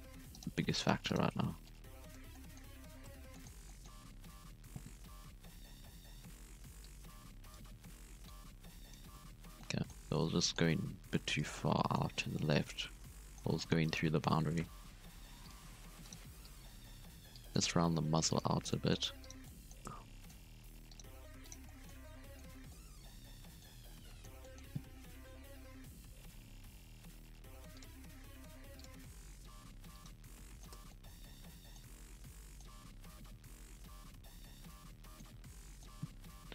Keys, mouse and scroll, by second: 0.3 right click, 0.7 shift+right click, 1.0 shift+right click, 1.6 click, 2.3-4.5 middle drag, 4.5 alt+a, 5.5 KP_1, 6.8 click, 8.2 click, 9.1 Tab, 9.4 scroll up 1, 9.5-9.9 middle drag, 9.9 Tab, 10.1-11.4 middle drag, 11.4 alt+a, 11.7 middle click, 12.2 scroll down 1, 12.3 middle click, 12.9 scroll up 2, 13.2 middle click, 13.9 right click, 14.5 KP_1, 15.2 g, 16.0 right click, 16.2 g, 17.3 click, 17.6 g, 18.7 scroll down 1, 18.7-19.2 middle drag, 19.2 right click, 19.4 middle click, 19.8 Tab, 20.0 scroll down 1, 20.0-20.4 middle drag, 20.4 Tab, 20.5-20.9 scroll up 4, 20.9 right click, 21.0 g, 21.6-21.9 middle drag, 21.9 scroll down 3, 22.0-22.5 middle drag, 22.5 Tab, 22.6-23.8 middle drag, 23.8 scroll up 1, 23.9 Tab, 24.0-25.1 middle drag, 25.1 KP_1, 25.7-26.1 scroll up 2, 26.1 k, 30.2 scroll down 2, 30.4 middle click, 30.7 Tab, 30.8-31.8 middle drag, 31.8 scroll up 1, 31.9 scroll down 1, 32.0-32.6 middle drag, 32.6 Tab, 32.8-33.6 scroll up 3, 33.6-36.4 middle drag, 36.4 KP_1.